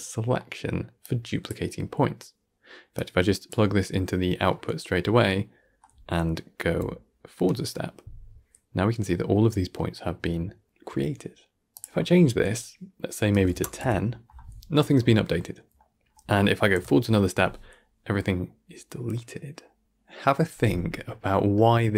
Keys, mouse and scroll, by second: 0.3 scroll down 1, 0.5-1.1 middle drag, 1.1 click, 3.1 drag, 6.9 Right, 9.9-11.6 middle drag, 11.9-14.9 drag, 15.6-16.8 middle drag, 16.8 Right, 21.0-21.3 scroll down 4, 21.3 middle click, 21.8 scroll down 1.